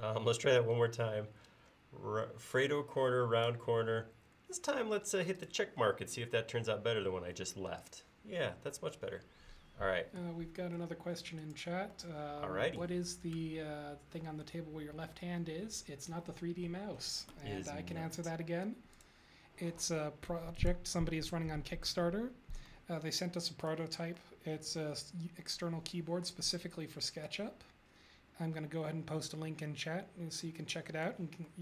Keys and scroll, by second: 21.2 space.